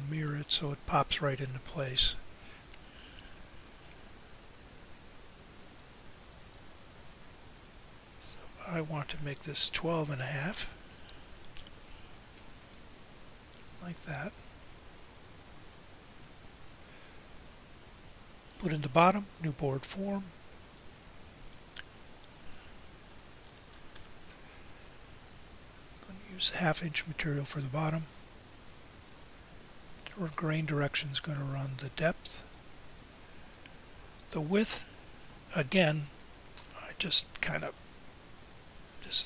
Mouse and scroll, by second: 12.1-14.7 right drag.